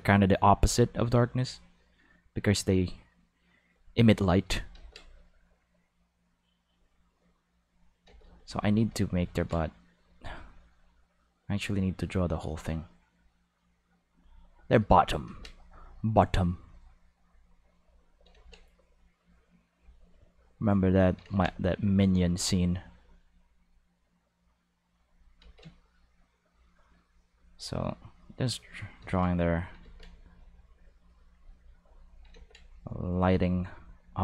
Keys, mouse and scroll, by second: 4.7 ctrl+z, 8.1 ctrl+z, 8.2 ctrl+z, 8.5 ctrl+z, 8.9 ctrl+z, 9.3 ctrl+z, 10.7-11.8 drag, 12.7-14.2 drag, 15.3 ctrl+z, 15.6 click, 17.2 click, 18.3 ctrl+z, 18.7 click, 20.5 click, 21.2 ctrl+z, 21.6-22.9 drag, 23.5-24.9 drag, 25.4 ctrl+z, 25.7-27.2 drag, 28.0 click, 29.0 ctrl+z, 29.3 click, 29.8 ctrl+z, 30.1-34.2 ctrl+drag, 32.3 ctrl+z.